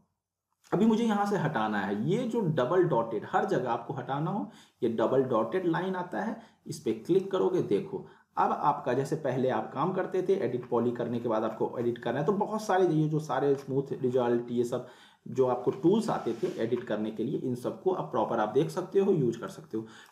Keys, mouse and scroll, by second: 6.1-7.4 drag, 10.6 scroll up 1, 10.8-11.3 scroll down 1, 12.1-12.6 scroll down 1, 13.5-15.3 scroll up 3, 15.8-17.9 scroll up 1, 19.5-20.1 click.